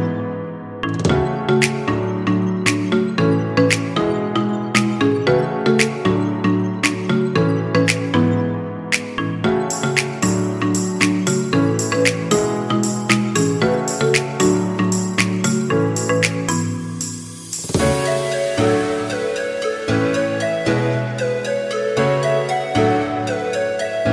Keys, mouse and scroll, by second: 0.0-1.8 drag, 1.8-2.3 scroll down 4, 2.4 shift+middle click, 3.2-3.6 scroll up 2, 3.6 shift+middle drag, 3.9 click, 5.3 click, 6.6 click, 8.0-8.6 scroll down 8, 8.9 click, 9.7 shift+middle click, 10.3 KP_0, 12.0 click, 13.0 click, 14.0-14.6 middle drag, 14.6 scroll up 4, 15.2-16.3 shift+middle drag, 16.3 scroll down 1, 16.6-22.8 shift+middle drag.